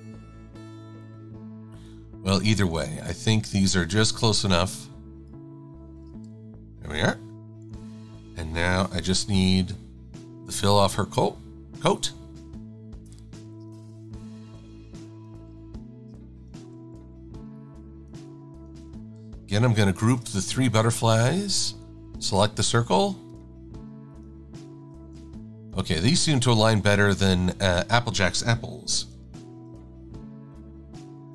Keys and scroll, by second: 6.3 a, 7.7 super+-, 7.9 super+-, 9.1 i, 16.5 shift+super+[, 20.0 super+g, 25.0 shift+super+a, 28.8 super+g, 29.5 super+x.